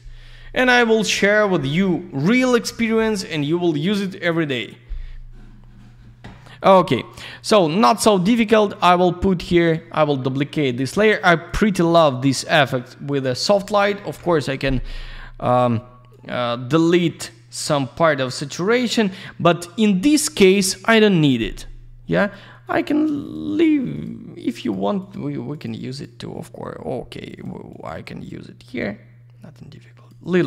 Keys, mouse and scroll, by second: 7.3 right click, 7.4 right click, 9.5 click, 9.6 click, 10.6 click, 10.7 click, 11.4 click, 11.5 click, 13.1 click, 13.2 click, 14.0 ctrl+u, 16.1 click, 17.2 click, 21.1 click, 21.2 click, 22.2 click, 22.3 click, 22.6 click, 22.7 click, 23.2 click, 23.3 click, 23.9 click, 24.0 click, 24.6 click, 24.7 click, 25.0 click, 25.1 click, 25.5 click, 25.6 click, 25.9 click, 26.0 click, 27.2 click, 27.4 click, 27.7 click.